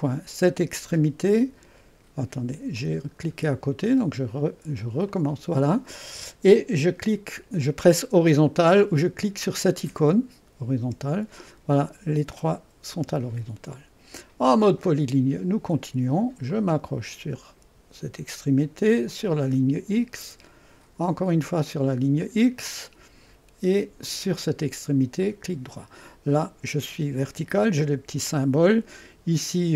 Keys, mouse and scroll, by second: 1.2 click, 2.8 click, 3.8 click, 5.1 click, 10.8 h, 14.5 click, 16.5 click, 19.1 click, 21.9 click, 24.1 click, 25.3-26.3 right drag, 26.7 right click.